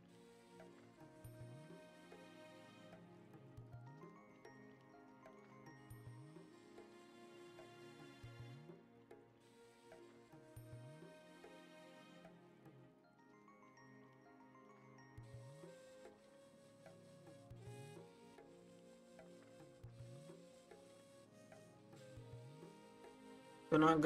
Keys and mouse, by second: 0.0 click, 0.2 middle click, 0.3 click, 0.6 middle click, 0.7 click, 0.9 click, 1.3 click, 1.4 click, 1.7 middle click, 2.0-2.7 drag, 2.7 middle click, 2.8 click, 3.0 middle click, 3.0 click, 3.2 click, 3.6 middle click, 3.7 click, 3.9 click, 4.2 middle click, 4.3 click, 4.6 click, 5.0 middle click, 5.1 click, 5.4 click, 5.7 middle click, 5.8 drag, 6.1 click, 6.3 middle click, 6.4 click, 6.7 click, 7.0-7.5 drag, 7.6 middle click, 7.7 click, 7.9 click, 8.1 middle click, 8.2 click, 8.5 click, 8.7 middle click, 8.8 click, 9.1 click, 9.3 middle click, 9.4 click, 9.7 click, 10.0 middle click, 10.1 click, 10.4 click, 10.7 middle click, 10.8 click, 11.1 click, 11.4 click, 11.5 middle click, 11.6 click, 11.8 click, 12.2 click, 12.3 middle click, 12.4 click, 12.7 click, 13.4 click, 13.7 middle click, 14.0 click, 14.3 drag, 14.6-15.4 drag, 15.6 middle click, 16.0 click, 16.1 click, 16.6 click, 16.7 click, 17.0 click, 17.3 click, 17.5 click, 18.0 click, 18.3 drag, 18.7 drag, 18.9 click, 19.4 click, 19.8 click, 19.9 click, 20.2 click, 21.3 click.